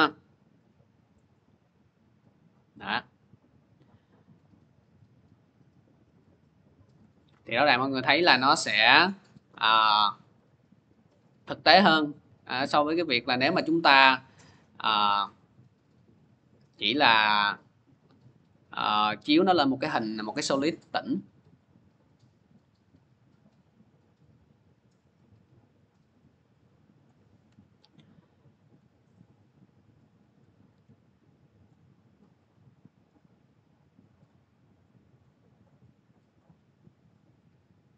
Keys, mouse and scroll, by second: 6.7 click, 7.9 ctrl+z, 12.1 ctrl+z, 18.6-23.6 drag, 26.8 click, 27.4 ctrl+z, 28.5 click, 30.5 v, 31.6-32.2 scroll, 32.8 click, 33.7 click, 36.5 click.